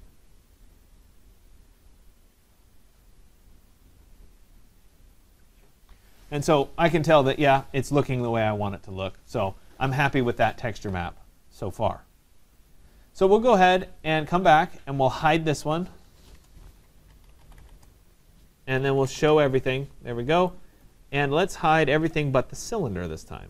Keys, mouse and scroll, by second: 12.7 click, 14.1 click, 14.6 click, 15.3-20.6 typing, 20.9 click, 23.4 click.